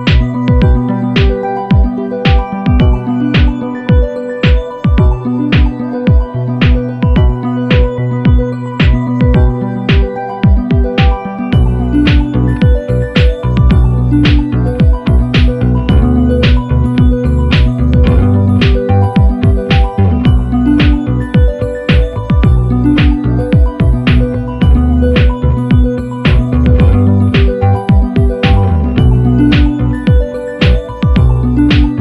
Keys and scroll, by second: 4.1 super+=.